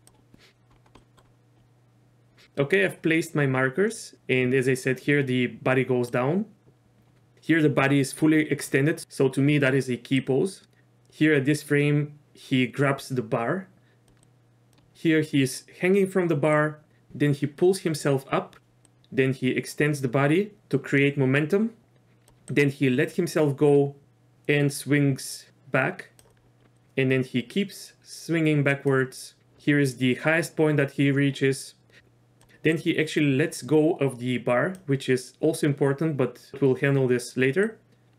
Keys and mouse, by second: 0.0 click, 1.0 middle click, 4.0 click, 6.2-7.3 drag, 10.4 click, 14.2 click, 16.6-17.1 drag, 18.9-20.6 drag, 21.8 click, 22.6-26.3 drag, 26.7-29.0 drag, 32.0-32.4 drag, 32.8 click, 37.8-38.1 drag.